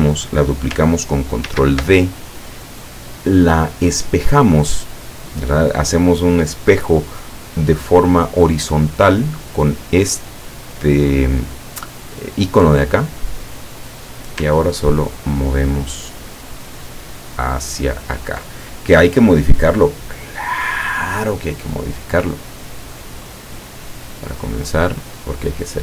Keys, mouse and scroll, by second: 1.5 ctrl+d, 13.3 click, 15.0-18.3 ctrl+drag, 22.5 click, 24.3-25.8 drag.